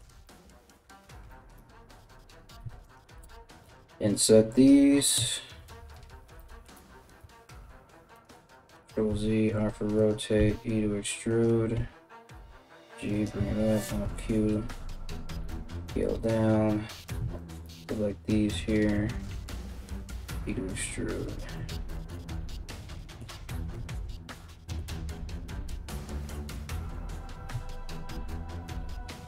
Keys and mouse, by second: 2.2 3, 2.4 right click, 3.3 i, 4.8 KP_1, 6.8 e, 8.0 ctrl+z, 8.7 r, 10.0 e, 11.4 g, 13.1 alt+q, 14.0 alt+q, 14.9 g, 16.6 right click, 17.0 shift+right click, 17.0-29.2 shift+middle drag, 19.5 e, 23.3 KP_1, 24.4 g.